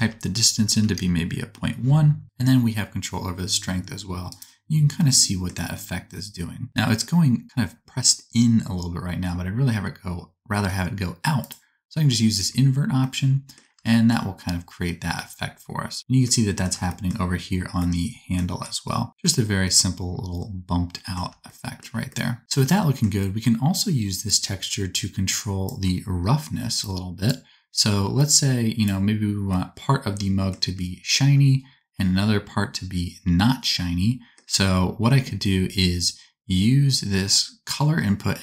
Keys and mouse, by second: 11.4-13.7 drag, 13.7-19.1 shift+middle drag, 19.1-38.4 drag.